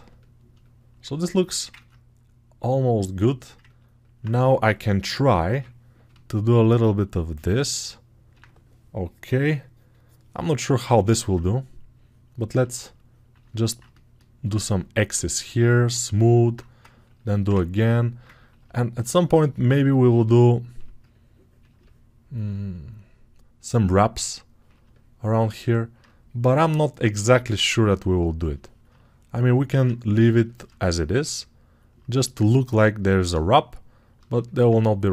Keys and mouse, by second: 3.7 alt+right click, 4.1-12.7 drag, 4.9 [, 5.4 [, 12.7 ctrl+right click, 13.6 ctrl+click, 15.1 shift+right click, 16.1 alt+click, 17.0-18.5 alt+right drag, 18.5-21.7 alt+drag, 21.7 right click, 21.8 alt+click, 22.1 alt+right click, 22.3-35.1 ctrl+drag.